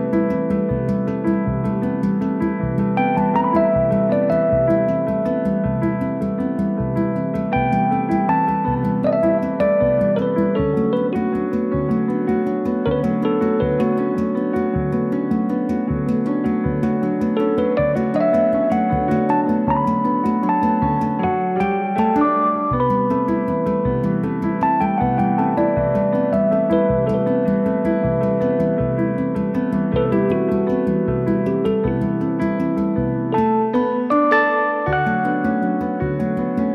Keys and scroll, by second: 0.2 Delete, 1.4 m, 6.9 space, 10.5 b, 12.9 space, 13.0 Escape, 17.6 space, 17.7 Escape, 22.2 space, 22.4 Escape.